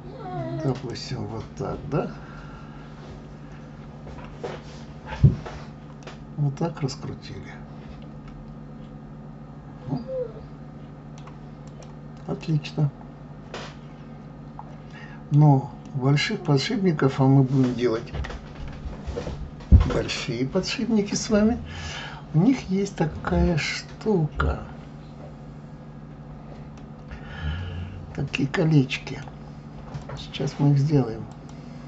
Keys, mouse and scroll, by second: 6.0-9.0 middle drag, 11.7 click, 12.4-15.4 middle drag, 15.9-18.8 middle drag, 26.8-29.8 middle drag, 30.0 click, 31.3 click.